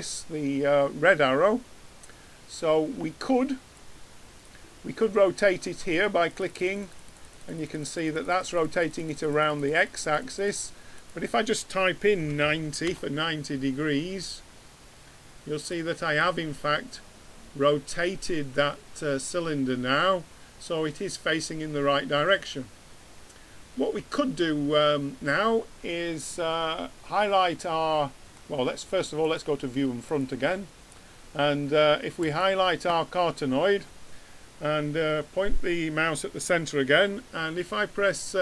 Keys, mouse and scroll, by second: 3.7-5.5 drag, 5.9-12.7 drag, 15.7-17.1 drag, 17.1-18.1 middle drag, 19.0 middle click, 29.2-30.9 drag, 32.2-34.0 drag.